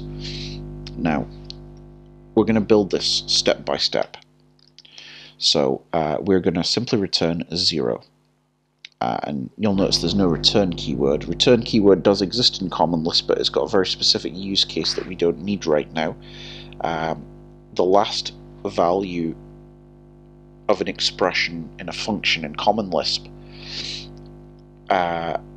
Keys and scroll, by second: 8.9 k.